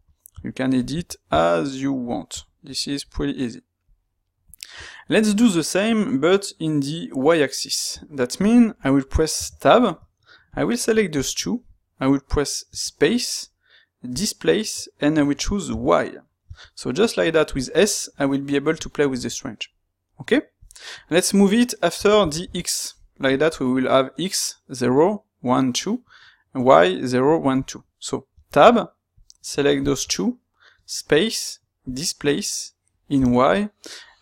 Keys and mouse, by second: 4.1-10.5 middle drag, 10.5 click, 11.1 shift+click, 29.1 click, 29.7 shift+click.